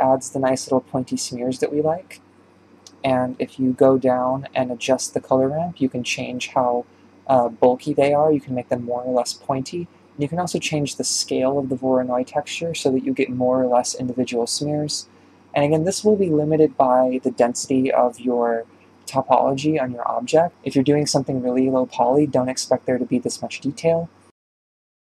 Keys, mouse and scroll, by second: 0.3-0.8 scroll up 5, 0.8-2.4 shift+middle drag, 2.4 ctrl+space, 3.2-3.5 scroll down 3, 3.5-4.0 shift+middle drag, 4.0 scroll down 1, 4.2-5.4 middle drag, 5.4-8.3 drag, 10.7-17.8 drag, 19.3-19.8 middle drag, 19.8 scroll down 2, 20.7 KP_Decimal, 21.1 scroll down 2, 21.3-22.6 middle drag, 22.6 KP_1, 24.9 click.